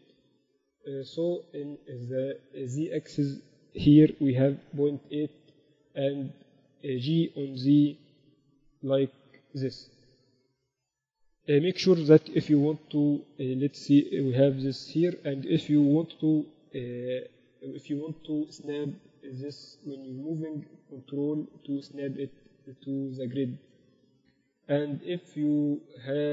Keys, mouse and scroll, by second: 1.2-2.7 middle drag, 2.7-4.7 drag, 6.5-8.3 middle drag, 7.7 g, 12.2 g, 14.3 g, 16.0 g, 24.3 shift+b.